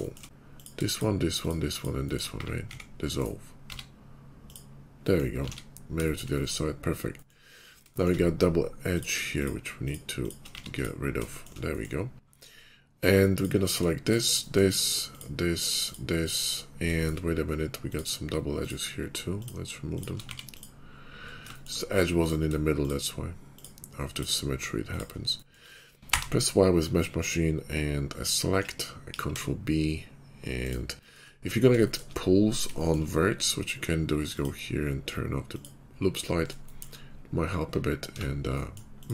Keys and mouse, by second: 0.2 ctrl+z, 1.7 shift+click, 2.1-5.2 middle drag, 2.6 s, 3.5 x, 5.3 alt+x, 5.3-9.2 alt+middle drag, 9.2 shift+click, 9.3 shift+middle click, 9.6 shift+click, 9.8-14.0 shift+middle drag, 10.4 x, 14.0 shift+click, 14.3-15.7 shift+middle drag, 15.7 shift+click, 15.8-17.7 shift+middle drag, 17.7 click, 17.8-22.0 shift+middle drag, 20.2 x, 22.0 click, 22.2-23.2 shift+middle drag, 23.4 shift+click, 25.5-29.0 middle drag, 25.9 y, 29.0 ctrl+b, 29.1 middle click, 31.1 middle click, 32.0-34.3 middle drag, 34.3-35.6 drag, 35.6-38.9 middle drag, 38.3 Tab.